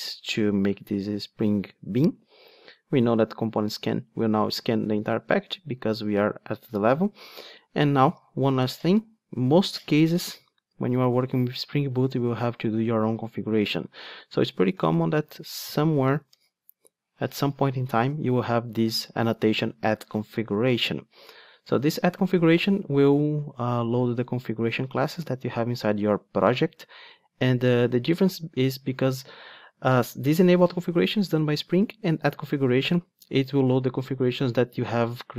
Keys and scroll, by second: 16.4 Return.